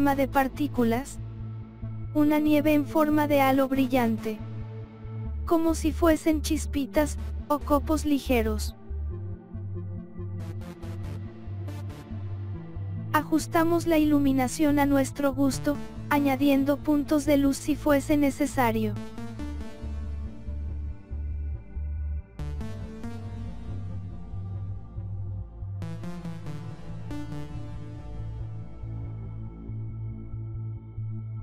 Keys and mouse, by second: 0.0 click, 0.9 KP_7, 2.0 click, 3.7 click, 4.5 KP_Subtract, 5.4 click, 6.0 click, 6.9 KP_0, 7.6 click, 7.9 click, 8.9 click, 9.8-10.9 drag, 11.5 click, 12.8 click, 13.8 click, 15.0 click, 16.0 click, 16.9 click, 17.8 click, 19.1 click, 20.0 click, 21.0 click, 22.3 click, 23.3 click, 24.4 click, 25.2 click, 26.0 click, 26.7 click, 27.4 click, 28.6 click.